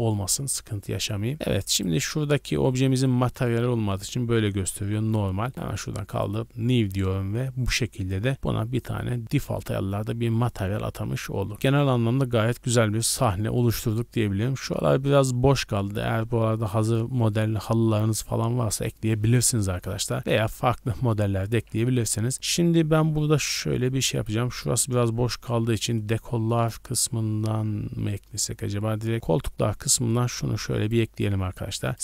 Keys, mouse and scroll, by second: 1.7 right click, 3.9 click, 6.2 click, 6.8 a, 7.0 a, 23.8 click, 25.9 click, 29.1 click, 30.1 click, 31.5-32.0 typing, 31.9 click.